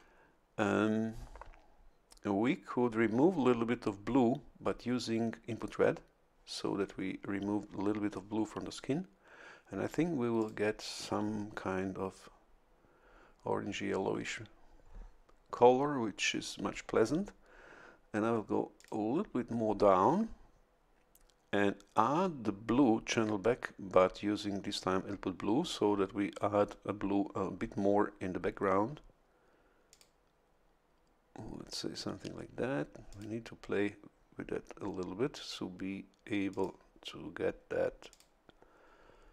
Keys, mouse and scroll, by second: 10.4 click, 18.8 click, 29.9 click, 33.1 click, 36.5 click, 38.1 click.